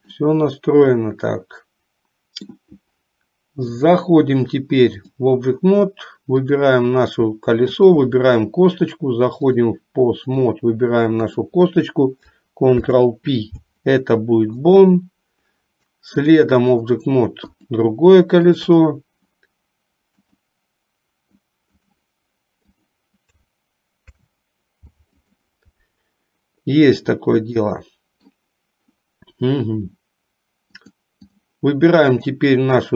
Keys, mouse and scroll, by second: 0.2-2.7 middle drag, 4.0-5.3 drag, 6.4 click, 7.8 shift+click, 9.6 click, 11.3 click, 12.8 ctrl+p, 16.3 click, 17.7 click, 18.5 shift+click, 20.3-22.1 drag, 22.8 click, 24.1 ctrl+p, 27.9 middle click, 30.8 click.